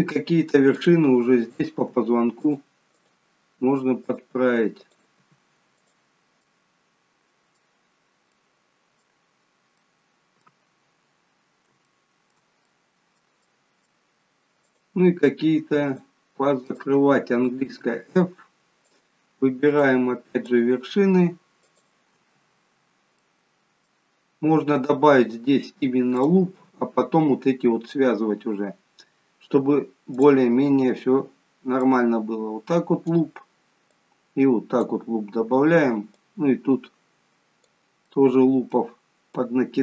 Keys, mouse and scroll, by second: 1.3 click, 1.7 g, 2.9 click, 3.5 g, 4.8 click, 5.2 g, 6.4 middle click, 7.9 scroll down 2, 8.3 middle click, 9.2-9.7 scroll down 2, 9.7-10.7 scroll up 1, 10.7 middle click, 10.7-11.6 scroll up 2, 11.8 shift+middle click, 12.7 middle click, 13.4 middle click, 14.7 click, 15.8 shift+click, 17.8 f, 18.8 click, 19.7 click, 23.1 middle click, 25.1-26.1 scroll up 1, 26.1 click, 30.1 click, 31.8 click, 36.1 click, 38.0 middle click, 39.3 click.